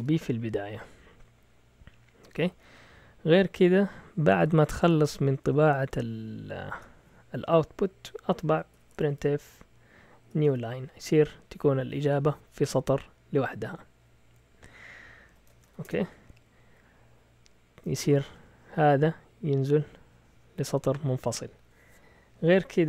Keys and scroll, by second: 0.0-0.5 typing, 2.3 Down, 2.5 Down, 2.6 Down, 6.7 Return, 8.5-11.0 typing, 15.2 Escape, 15.3-16.1 typing.